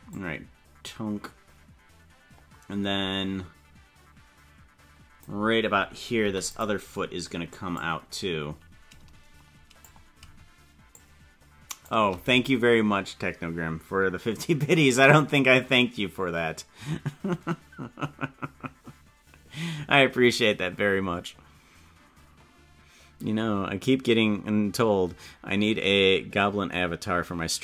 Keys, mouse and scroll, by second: 0.1-5.2 drag, 7.7-9.8 drag, 10.9 shift+click.